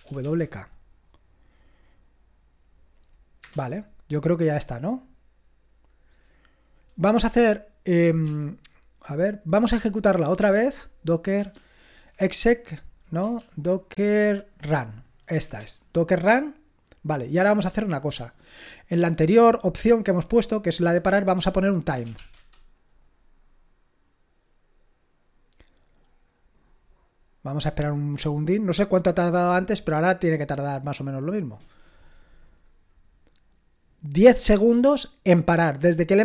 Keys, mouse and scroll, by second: 0.0-0.7 typing, 3.4 Return, 8.2 ctrl+p, 9.7 ctrl+p, 11.5 ctrl+p, 13.4 ctrl+p, 15.4 Return, 18.9 ctrl+p, 19.3 ctrl+p, 19.9 ctrl+p, 20.8 ctrl+a, 21.5-22.3 typing.